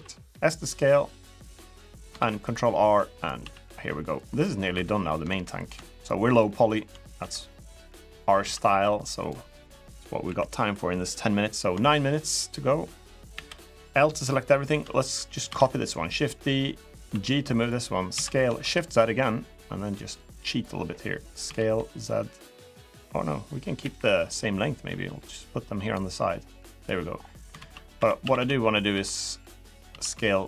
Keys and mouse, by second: 1.9 ctrl+r, 3.1 s, 4.2 middle click, 4.5 3, 5.7 shift+click, 6.1 shift+click, 6.4 shift+click, 6.9 e, 8.1 s, 9.2 middle click, 10.0 KP_1, 11.6 shift+middle click, 12.8 click, 13.1 l, 15.2 shift+d, 16.8 g, 17.9 s, 21.2 s, 23.6 KP_1, 24.6 g, 27.3 alt+z, 27.7-29.6 typing.